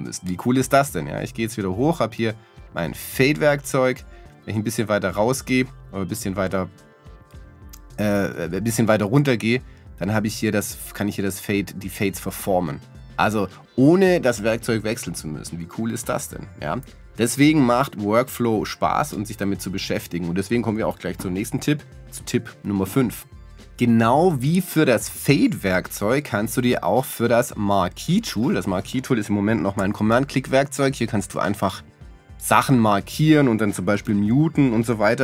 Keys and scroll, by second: 34.1 m.